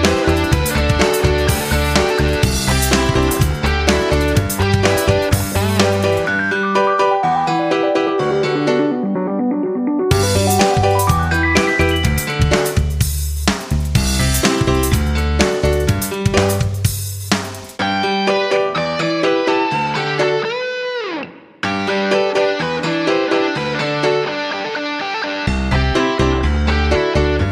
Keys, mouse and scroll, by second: 1.0-3.5 shift+drag, 4.1 ctrl+g, 4.8-13.8 shift+drag, 15.0 F9, 16.7 click, 22.2 F9, 23.2 click.